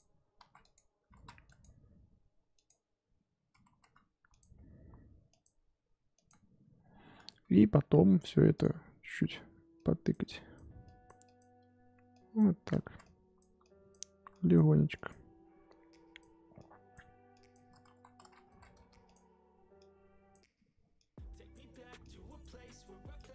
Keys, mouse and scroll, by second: 0.4 ctrl+z, 0.6 click, 1.1 ctrl+z, 1.4-3.5 drag, 3.5 ctrl+z, 3.7 ctrl+z, 4.3-12.8 drag, 12.8 ctrl+z, 13.0-17.9 drag, 17.9 ctrl+z, 18.4 ctrl+z, 18.7 f, 19.7-23.3 drag.